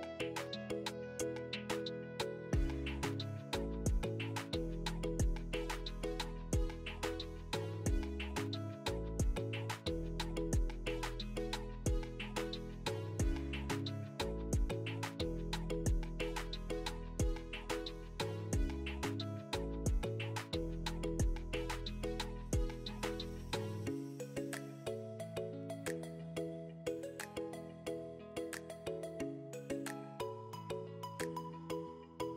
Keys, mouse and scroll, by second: 0.9 click, 3.4 click, 4.9 click, 7.9 click, 8.0 click, 12.6 Tab, 19.7 click, 20.4 2, 20.8 click, 21.4 3, 21.7 click, 23.2 2, 23.6 click, 27.6 shift+click, 29.9 click.